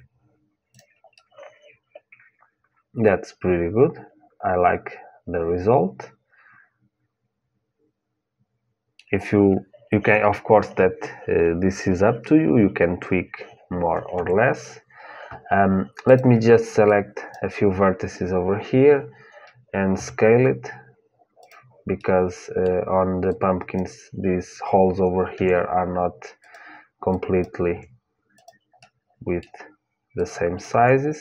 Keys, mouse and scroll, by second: 0.5-2.5 drag, 2.5 middle click, 14.0 Tab, 15.9-18.7 drag, 19.7 s, 23.5-25.1 drag, 23.5 middle click, 25.1 s, 27.2 click, 27.2 s, 27.4 s, 30.4 click, 30.4 s, 30.6 s.